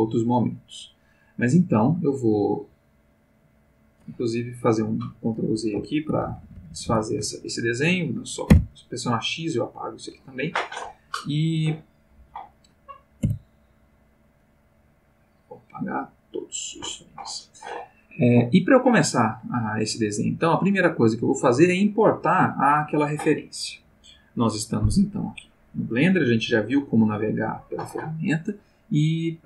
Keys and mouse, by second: 6.1 ctrl+z, 8.5 x, 9.2 click, 13.2 i, 14.6-15.9 drag, 16.1 click, 25.6 click.